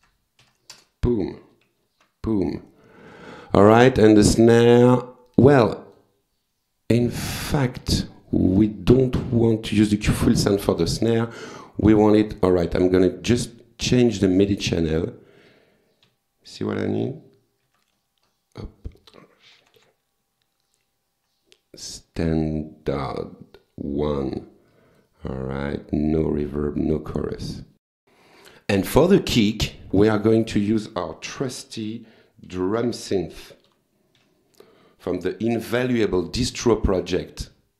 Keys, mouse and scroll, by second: 0.8 Return, 1.8 alt+F4, 3.7 click, 5.3 click, 7.4 click, 8.5 click, 11.4 click, 12.5 click, 14.9 click, 16.1 Page_Down, 17.7 Page_Up, 18.3 scroll up 2, 18.6-19.0 scroll down 2, 19.5 Page_Down, 23.0 click, 24.7 click, 27.9 click, 28.9 click, 29.3 right click, 29.8 click, 32.5 d, 32.8 r, 33.7 u, 34.2 m.